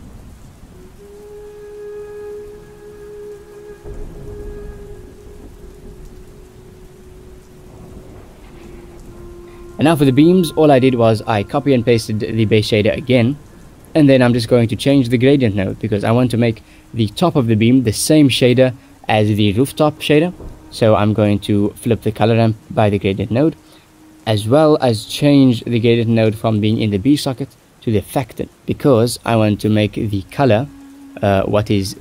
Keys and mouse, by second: 0.2 shift+middle click, 2.4 drag, 7.2 shift+middle click, 8.9 shift+middle click, 9.5 click, 10.6 ctrl+v, 11.2 drag, 12.2 shift+middle click, 13.8 middle click, 15.2 click, 15.4 shift+middle click, 16.9 shift+middle click, 17.8 shift+middle click, 22.3 middle click, 24.0 click, 25.6 click, 27.0 click, 28.1 shift+middle click, 30.8 middle click, 31.4-32.0 drag.